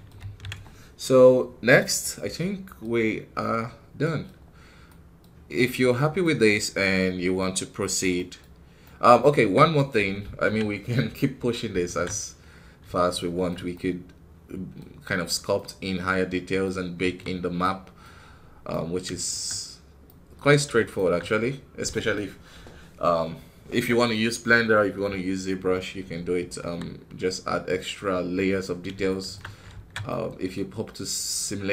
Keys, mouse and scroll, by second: 3.2-3.9 scroll down 1, 3.9 scroll down 2, 3.9 middle click, 4.2-4.7 scroll up 1, 4.7-9.2 middle drag, 9.2 KP_1, 9.6-11.7 right drag, 11.7 alt+a, 12.4-12.9 scroll up 2, 13.0-14.8 shift+middle drag, 14.8-15.4 scroll up 1, 15.4-16.9 middle drag, 16.9 KP_1, 17.5-19.3 middle drag, 19.3-19.9 scroll up 2, 20.0 middle click, 20.2 scroll up 1, 20.8 shift+middle click, 21.1 scroll up 1, 23.1 scroll down 2, 26.5 KP_1, 28.5 scroll down 3, 28.9-31.7 shift+middle drag.